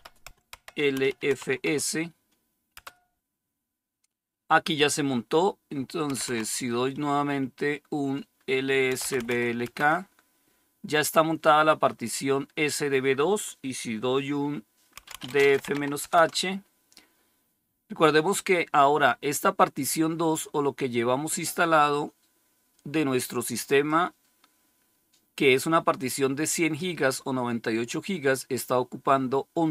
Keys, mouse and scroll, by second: 0.4-1.2 typing, 5.8-6.7 typing, 8.6-9.6 typing, 14.6-16.3 typing, 23.7-27.4 drag.